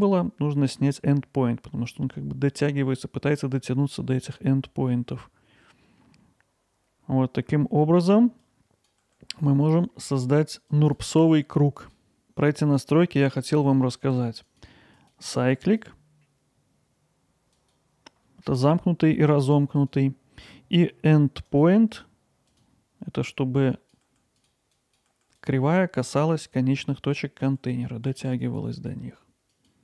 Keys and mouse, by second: 6.6 click, 8.6 click, 9.0 g, 10.7 click, 11.1 g, 12.2 g, 14.5 click, 17.6-24.1 drag, 24.1 g, 24.9 click, 25.1 g, 27.3 click, 27.6 g.